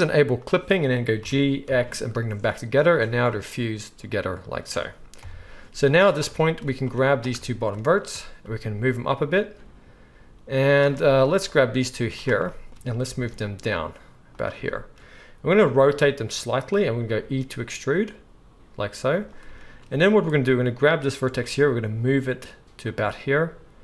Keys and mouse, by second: 0.4 click, 0.4-6.9 middle drag, 1.2 g, 5.2 KP_1, 5.8 z, 6.9-10.7 drag, 8.4 g, 10.7 shift+middle click, 11.5-14.4 drag, 11.9 z, 13.1 g, 14.4-20.4 shift+middle drag, 15.6 r, 17.0 e, 20.4-22.9 drag, 21.4 g, 22.9-23.8 middle drag.